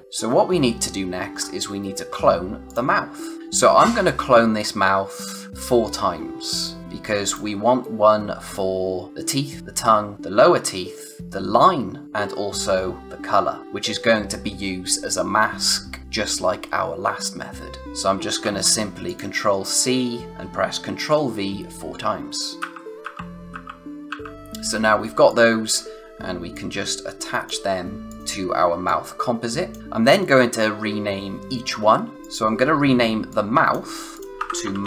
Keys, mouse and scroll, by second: 2.6 click, 3.0 space, 3.2 click, 6.4 space, 6.6 click, 6.8 space, 17.8 ctrl+Num_Lock, 18.4 ctrl+c, 19.0 click, 22.6 ctrl+v, 24.4 click, 25.0 click, 25.6 space, 25.9 space, 26.5 click, 29.8-30.3 scroll down 1, 30.3 space, 30.5 click, 30.8 space, 32.2 click, 34.3-34.8 typing.